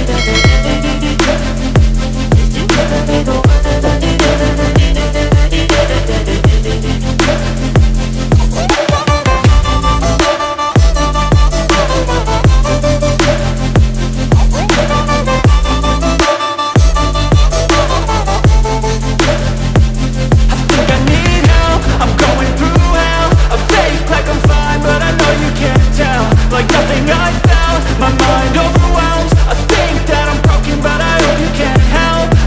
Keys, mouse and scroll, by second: 1.1 F4, 2.6 F9, 4.0 click, 4.2 ctrl+o, 5.6 scroll down 1, 7.5 click, 13.9 click, 14.8 F4, 17.2 F9, 19.8 F9, 20.3 click, 23.0 scroll down 1, 25.5 click, 32.1 F4.